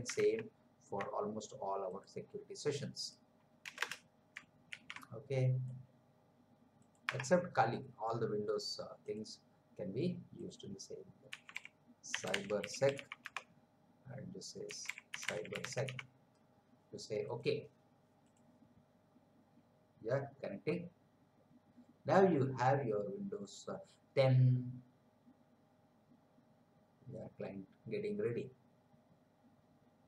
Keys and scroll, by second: 0.4 alt+Tab, 3.6 Return, 4.7 ctrl+v, 7.0 Tab, 11.1-16.3 typing.